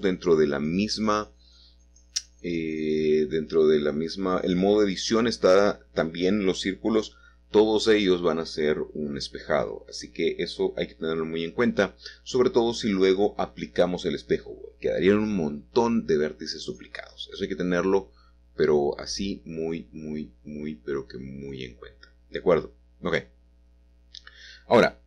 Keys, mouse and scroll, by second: 2.9-3.9 drag, 7.5 middle click, 8.9 shift+middle click, 12.9 Escape, 13.5 g, 13.8 y, 14.9 click, 15.3-16.5 middle drag, 17.5 click, 18.0 shift+click, 19.1 shift+click, 19.6 shift+click, 22.2 click, 23.7 e.